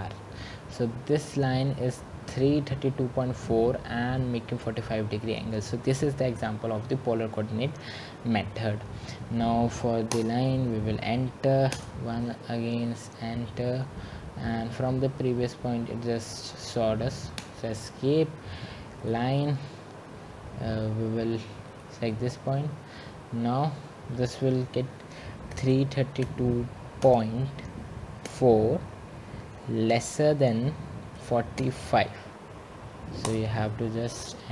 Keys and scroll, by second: 0.7 Return, 10.4 Escape, 17.7 Return, 25.9 Escape, 33.5 typing.